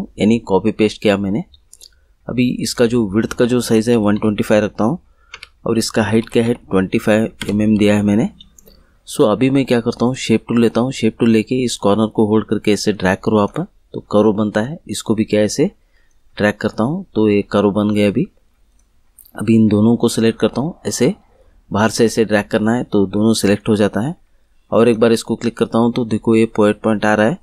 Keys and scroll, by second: 3.6 1, 3.9 2, 4.1 5, 5.3 Tab, 6.1 2, 6.4 5, 7.3 Return.